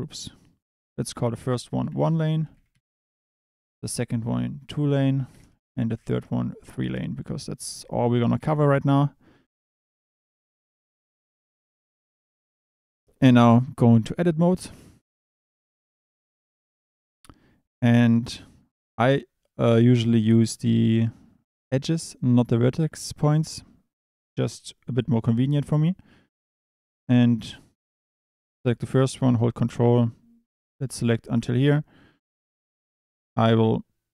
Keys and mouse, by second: 0.8-2.8 drag, 3.7-5.4 drag, 6.6-8.4 drag, 14.1 Tab, 15.6 a, 16.0 click, 22.1 click, 24.0 click, 26.9 click, 30.0 ctrl+click, 33.0-34.1 drag.